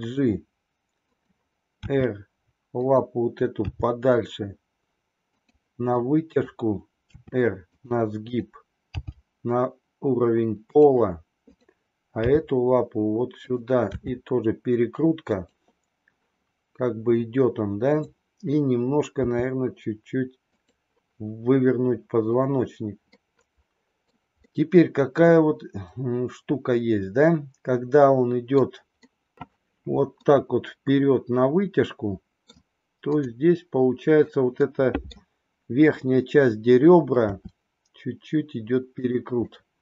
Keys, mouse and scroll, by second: 1.7 r, 3.6 g, 5.8 click, 7.0 r, 8.2-9.5 drag, 9.6 g, 12.2 g, 14.0 r, 17.9 click, 19.2 r, 23.1-24.1 middle drag, 24.5-28.6 middle drag, 28.8-29.3 middle drag, 30.0-32.6 middle drag, 33.0 click, 34.7 middle click, 37.3 r, 39.4-39.8 middle drag.